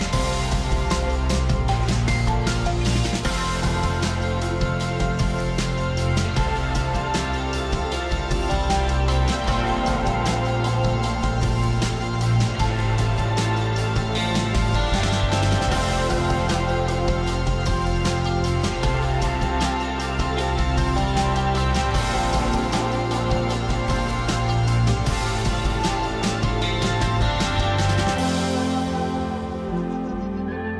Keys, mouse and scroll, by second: 0.6 click, 1.4 click, 3.4 click, 5.9 ctrl+i, 8.9 click, 10.3 click, 11.7 right click, 15.4 click, 17.6 click, 19.7 click, 21.9 click, 23.8 click, 24.8 click, 26.0 click, 28.8 click, 29.2 click, 29.5 click, 29.8 click, 30.2 click.